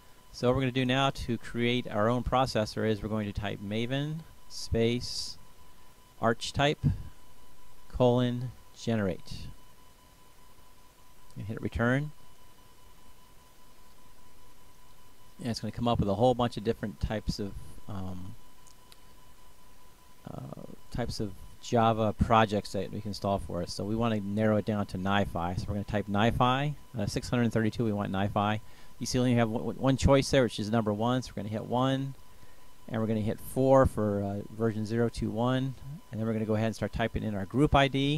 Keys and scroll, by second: 0.0-1.0 typing, 3.3-11.0 typing, 14.0 Return, 23.5-24.9 typing, 26.7 Return, 30.0 1, 30.6 Return, 33.9 Return, 38.0 s.